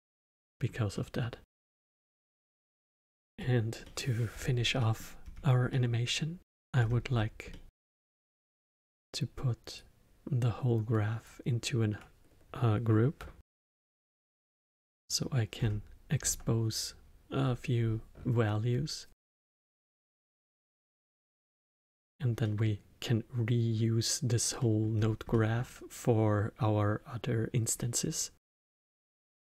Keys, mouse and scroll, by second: 3.4-3.8 scroll down 1, 3.8 middle click, 4.3-4.7 scroll down 2, 4.7 middle click, 5.2-5.7 scroll down 2, 5.7-6.8 middle drag, 6.8-7.5 scroll down 5, 7.5-9.7 middle drag, 9.7 click, 13.4 ctrl+g, 14.3-14.9 scroll up 4, 14.9 middle click, 15.6-16.4 scroll up 8, 20.7 middle click, 21.1-21.6 scroll down 7, 21.6-24.9 middle drag, 24.9-25.3 scroll down 2, 25.3-28.9 middle drag, 28.9-29.4 scroll up 1, 29.4-29.5 middle drag.